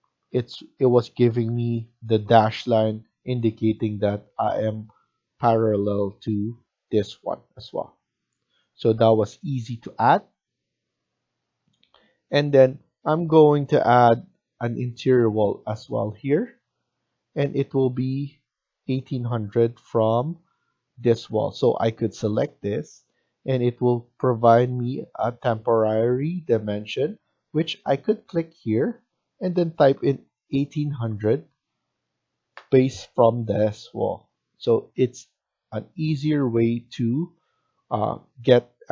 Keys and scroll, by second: 20.3 Escape, 20.6 Escape, 29.8-30.7 typing, 32.3 Return, 37.0 Return.